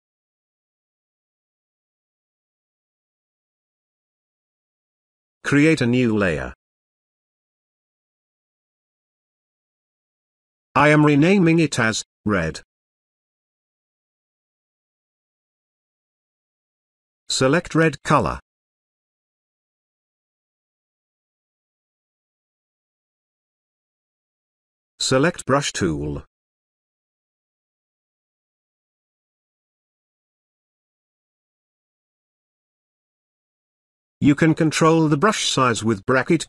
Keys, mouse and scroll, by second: 6.5 click, 10.0 click, 11.4-12.6 typing, 12.6 Return, 16.7 click, 21.2 click, 25.5 click, 25.5-27.1 drag, 30.5 space, 30.9-31.5 ctrl+drag, 33.1-35.8 typing.